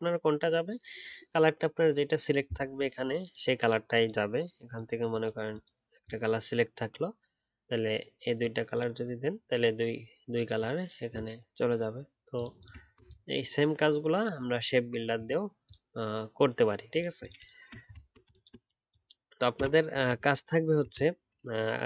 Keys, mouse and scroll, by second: 12.8-14.3 alt+scroll down 3, 17.9-19.7 alt+scroll down 4.